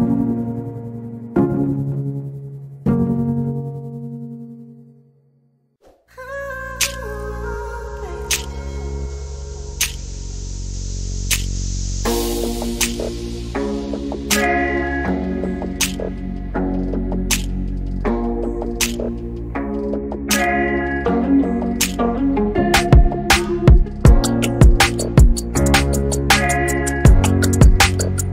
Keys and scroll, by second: 6.4 q, 7.2 Delete, 10.0 ctrl+z, 10.8 m, 19.8 typing, 21.8-22.5 typing, 24.2 q, 25.6 m.